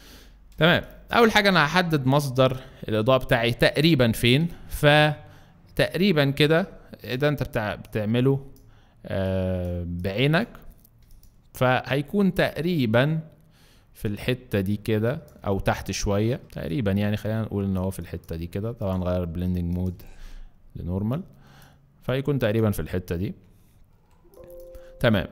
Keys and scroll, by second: 0.6 alt+space, 2.8 b, 24.0 alt+space.